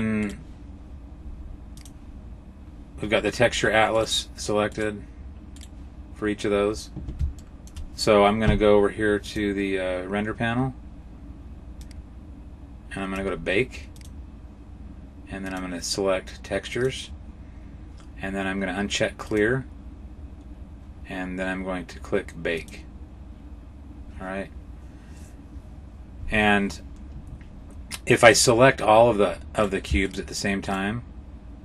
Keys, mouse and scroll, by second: 0.0 right click, 1.6 click, 3.8 right click, 4.6 right click, 5.4 right click, 7.2 shift+middle click, 9.1 click, 11.7 click, 13.8 click, 15.3 click, 19.1 click, 23.0 click, 29.4 right click, 29.9 shift+right click, 30.5 right click.